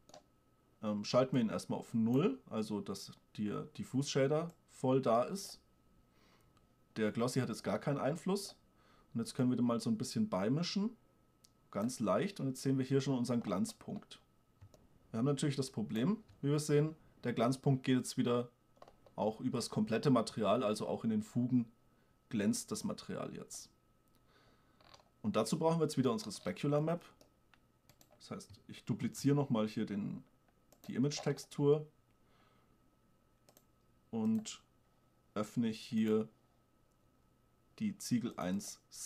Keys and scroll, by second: 29.3 shift+d.